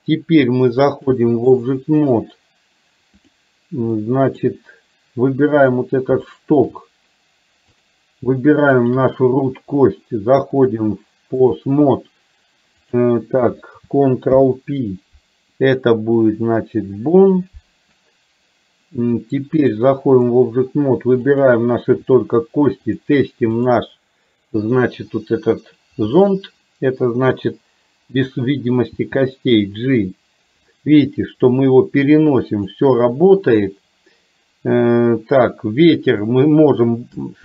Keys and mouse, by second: 1.2 click, 3.2-3.5 drag, 4.0-4.4 middle drag, 6.4 shift+middle drag, 7.8 click, 8.8 shift+click, 10.7-11.7 drag, 14.4 ctrl+p, 19.7 click, 21.4 click, 22.9-23.8 drag.